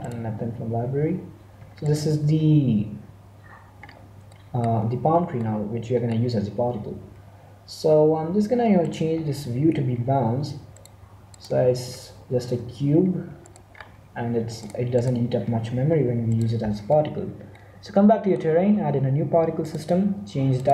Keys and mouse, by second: 0.0-1.7 drag, 1.7 middle click, 1.8-3.6 right drag, 2.6 g, 3.8 middle click, 8.7-10.7 drag, 10.7-12.6 middle drag, 12.5 1, 13.6 middle click, 17.5-19.5 middle drag, 19.5-20.7 drag.